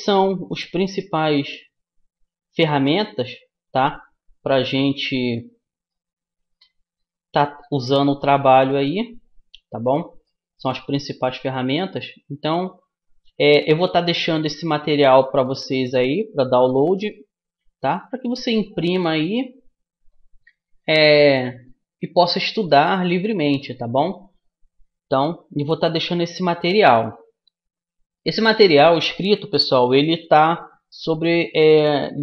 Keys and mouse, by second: 2.8 middle click, 6.4-8.2 right drag, 6.8-8.2 drag, 8.2 middle click, 8.6-9.9 drag, 12.4-14.0 drag, 15.4-17.0 drag, 18.7 middle click, 19.0-22.4 drag, 23.1-25.6 middle drag.